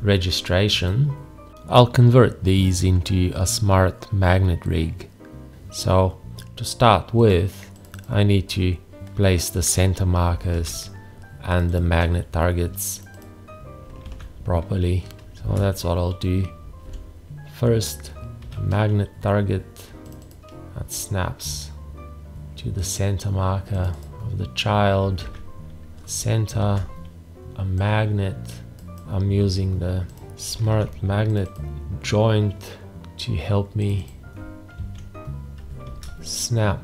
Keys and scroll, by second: 10.5 alt+`, 14.1 alt+`, 15.4 shift+`, 16.9 v, 25.2 alt+`, 26.6 shift+`, 30.6 alt+`, 34.8 alt+`, 35.8 shift+`.